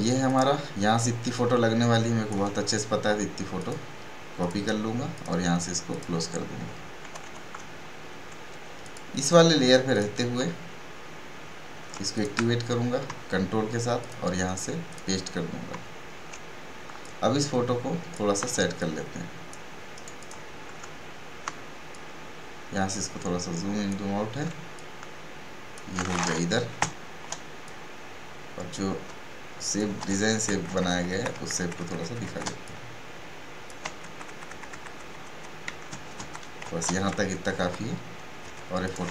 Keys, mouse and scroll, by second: 0.2-3.5 drag, 7.0-7.5 typing, 7.8 alt+scroll down 1, 8.8 click, 9.2 right click, 11.9 click, 17.0-18.5 alt+shift+drag, 18.5 space, 18.8 click, 19.1 space, 19.4 space, 20.3 space, 20.9 alt+scroll down 1, 22.2-24.7 drag, 24.7 alt+shift+click, 24.9-26.8 alt+shift+drag, 26.8 shift+Up, 27.6-30.0 drag, 30.0 shift+Right, 32.6-34.0 drag, 34.0 shift+Up, 35.6 shift+Up, 38.8 click.